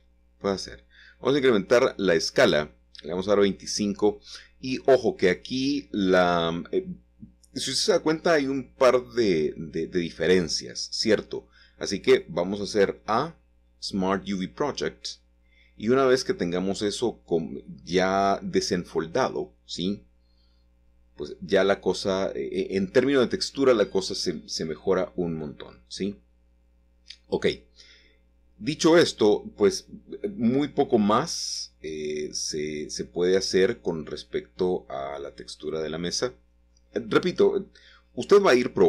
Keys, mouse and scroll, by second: 0.0-0.1 typing, 0.1 Return, 2.1-3.2 middle drag, 3.2-3.9 scroll down 2, 3.9 scroll down 1, 7.0 u, 10.3 a, 11.9 click, 11.9 typing, 13.1 click, 14.5 middle click, 16.3-17.5 scroll up 2, 17.5 scroll up 1, 17.7-18.5 scroll down 2, 18.5-19.5 drag, 20.2-22.1 shift+drag, 23.5-26.4 typing, 24.4 Escape, 24.6 Escape, 27.5 shift+click, 28.3 middle click, 28.7 typing, 33.6 shift+click, 34.0-34.7 scroll down 1, 34.9 typing, 34.9 middle click, 37.8 click, 38.0 click.